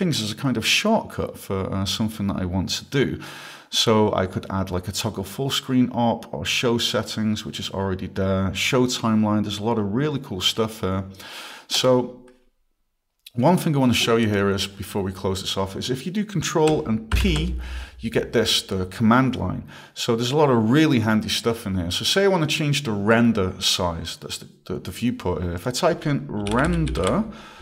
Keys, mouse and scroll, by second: 5.5 scroll, 7.8 scroll, 9.0 scroll, 11.8 click, 14.2 click, 17.1 ctrl+p, 25.6 click, 26.1-27.5 typing.